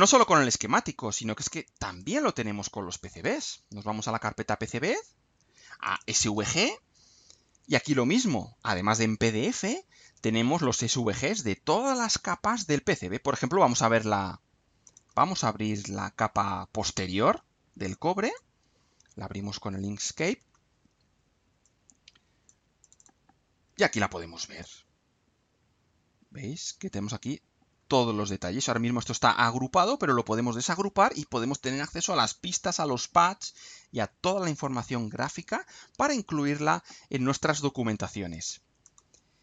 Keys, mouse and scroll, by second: 0.0 click, 2.0 click, 3.1 click, 5.9 click, 14.9 click, 15.1 right click, 18.3 click, 21.6 click, 22.8 click, 24.6-25.3 ctrl+scroll up 4, 26.2-26.9 ctrl+scroll up 2, 27.4 ctrl+scroll down 2, 28.0 ctrl+scroll up 2, 28.6 click, 38.8 click.